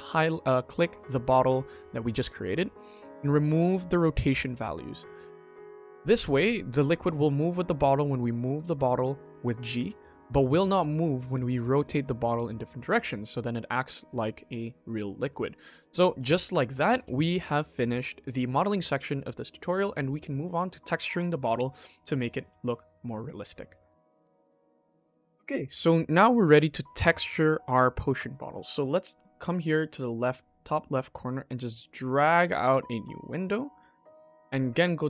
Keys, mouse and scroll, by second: 3.3 click, 5.3 click, 5.8 click, 6.1 click, 7.3 g, 11.1 r, 13.9 click, 14.8-15.1 shift+middle drag, 15.8 click, 16.4 shift+middle drag, 16.8 ctrl+s, 31.4-33.9 drag.